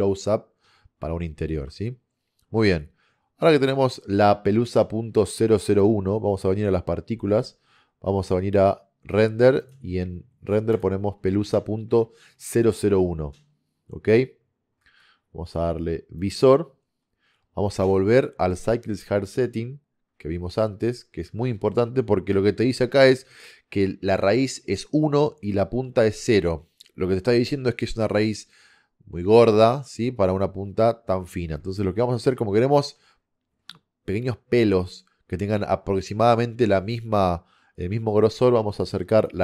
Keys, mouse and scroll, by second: 5.7-7.6 drag, 9.7-14.2 drag, 20.7-32.8 middle drag, 33.2 middle click.